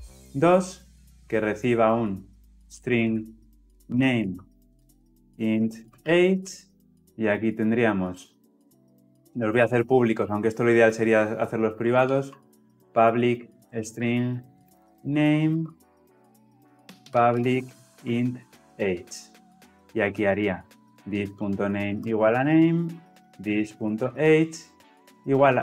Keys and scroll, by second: 7.0 ctrl+alt+o, 12.9 Return, 21.7 Return.